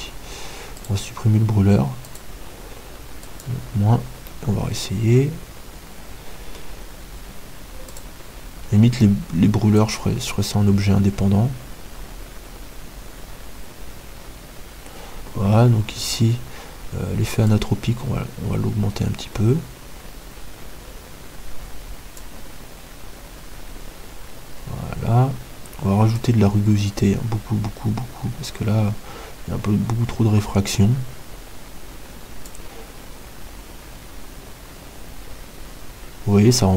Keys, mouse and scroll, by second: 1.6 Delete, 1.6-4.5 right drag, 2.3-5.3 drag, 4.5-6.6 middle drag, 8.6-10.5 drag, 17.9-20.6 drag, 26.7-28.8 drag.